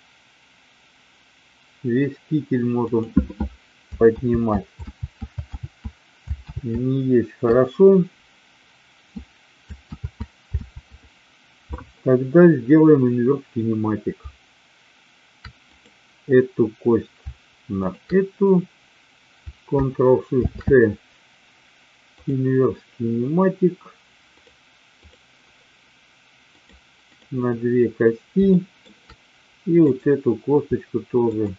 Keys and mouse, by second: 4.3 ctrl+z, 5.0 ctrl+z, 5.6 ctrl+z, 6.6 ctrl+z, 10.0 ctrl+z, 10.6 ctrl+z, 15.5 click, 22.4 ctrl+shift+c, 24.3 click, 26.5 click, 28.5 shift+middle drag, 29.8-30.8 drag.